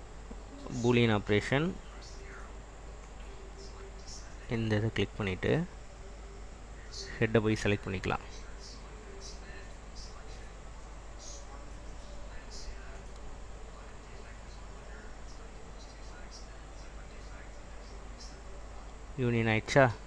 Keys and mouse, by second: 6.7 click, 9.2 click, 12.6-14.4 drag.